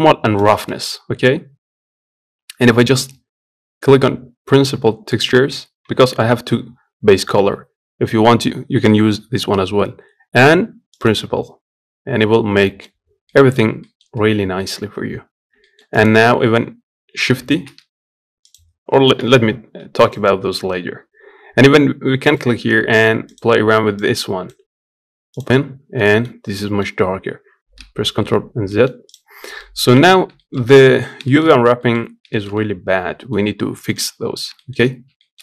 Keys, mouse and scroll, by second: 12.0 scroll up 5, 12.1 scroll down 1, 13.0 middle click, 13.3 scroll up 1, 13.6 middle click, 14.0 scroll down 1, 14.3-17.3 middle drag, 17.3 shift+d, 18.9 Delete, 19.8 click, 22.1-25.7 drag, 25.7 middle click, 26.0 scroll up 1, 26.3-27.5 middle drag, 27.5 ctrl+z, 28.1 scroll down 1, 28.4 middle click, 28.8 click, 29.1 scroll up 2, 29.3 middle click, 29.8 scroll up 1, 30.1 shift+middle click, 30.7-31.0 scroll up 1, 31.0 shift+middle click, 31.3 scroll down 2, 31.5 middle click, 31.8 scroll up 1, 32.1-35.4 shift+middle drag.